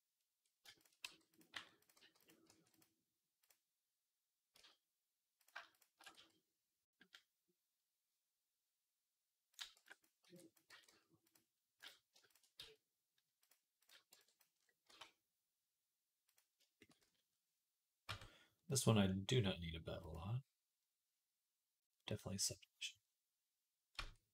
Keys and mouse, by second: 0.9 g, 1.4 r, 1.8-3.2 middle drag, 1.8 g, 2.3 r, 3.2 click, 3.3-5.3 middle drag, 4.4 z, 5.3 click, 5.4-13.9 shift+middle drag, 6.0 x, 9.6 b, 10.1 b, 10.5 g, 12.4 x, 13.9-18.7 drag, 13.9 b, 14.7 e, 16.8 z, 17.9 Tab, 18.7-19.8 middle drag, 19.8-24.3 drag, 23.8 Tab.